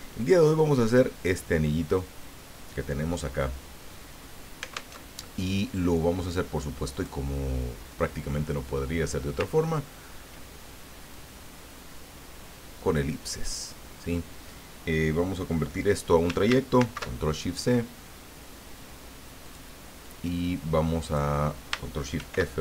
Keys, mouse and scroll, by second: 0.5 click, 5.0 alt+Tab, 6.9 click, 8.0-9.4 drag, 9.5-10.0 ctrl+scroll up 4, 11.1-14.7 drag, 16.8 ctrl+shift+c, 19.4 click, 21.0 click, 22.1 ctrl+shift+f.